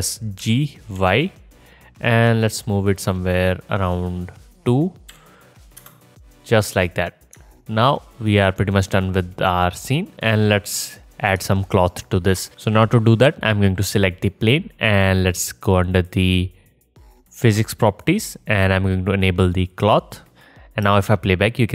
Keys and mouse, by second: 0.4 g, 13.7-15.9 middle drag, 15.9 click, 16.1-18.2 middle drag, 18.2 click, 18.3-19.8 middle drag, 19.8-21.7 drag, 20.9 space.